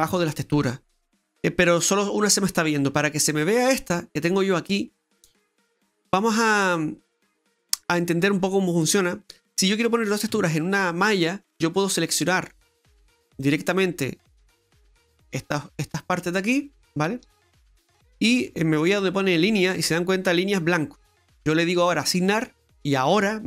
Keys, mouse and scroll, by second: 8.3-8.6 scroll up 1, 8.6 middle click, 10.3 Tab, 11.0 middle click, 11.9 right click, 13.4 click, 14.2 right click, 14.6 shift+right click, 14.9 right click, 15.3 shift+right click, 16.1 shift+right click, 16.4 shift+right click, 16.9 shift+right click, 19.4 click, 22.1 click, 22.6 right click.